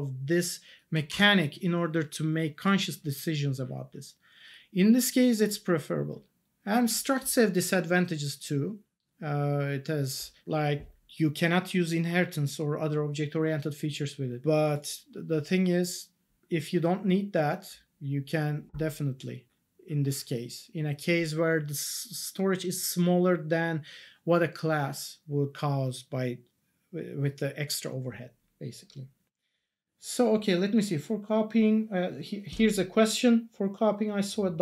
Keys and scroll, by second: 1.1 Tab.